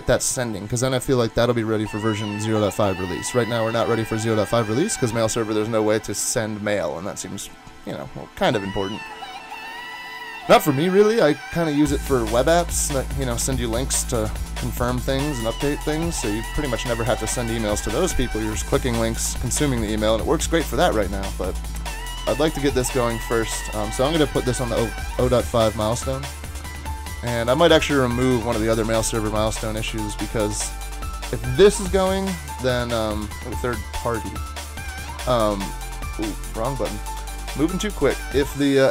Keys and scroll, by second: 34.8 y.